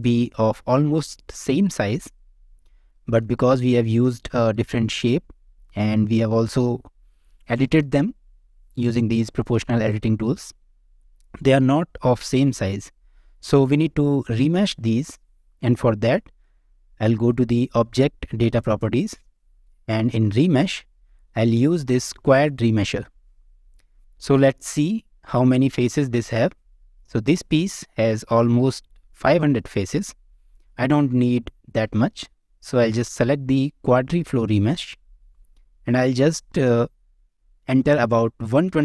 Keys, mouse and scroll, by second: 1.1 middle click, 2.1 middle click, 2.9 shift+middle click, 3.3-4.5 middle drag, 11.1 middle click, 12.9 middle click, 13.7 Tab, 15.9 scroll down 2, 19.3-20.1 scroll down 3, 20.1-21.5 scroll down 3, 20.3 click, 23.9 Tab, 23.9 a, 24.8 click, 25.8 Tab, 32.4 Tab, 34.2-38.8 drag.